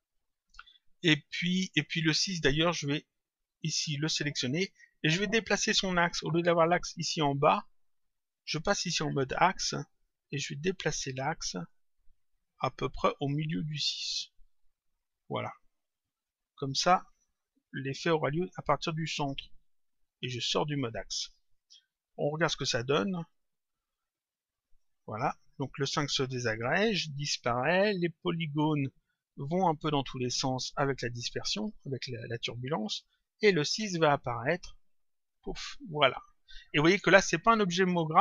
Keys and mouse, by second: 1.3 click, 4.5 click, 9.4 click, 11.5 click, 13.8 click, 15.8 click, 17.9 click, 20.4 click, 22.3 click, 24.6 click, 37.8 click.